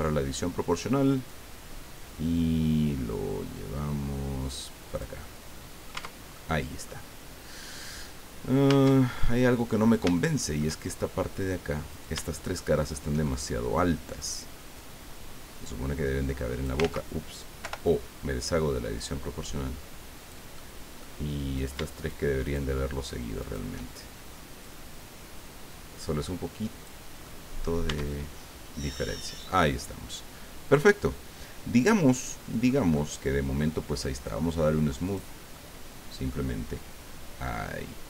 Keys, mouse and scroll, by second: 1.3 click, 2.2-2.9 scroll down 2, 3.1-4.0 scroll down 3, 5.2 click, 5.9 Tab, 6.3 click, 8.7 Tab, 9.1 click, 10.1 shift+click, 10.8-11.2 shift+scroll up 3, 11.9 shift+right click, 12.3 shift+right click, 12.8 shift+right click, 13.2 shift+middle click, 14.8-16.3 drag, 16.3 scroll up 1, 16.8 ctrl+z, 17.6 o, 18.4-20.5 drag, 21.5 shift+right click, 22.0 shift+right click, 22.4 shift+right click, 23.4 shift+right click, 24.6-27.0 drag, 27.2 middle click, 27.9 Tab, 28.2-28.5 scroll down 1, 28.9 middle click, 30.3 scroll down 1, 30.7-32.8 drag, 32.9 click, 35.0 click, 35.5 click, 36.6-37.2 scroll up 4, 37.5-38.0 scroll down 4.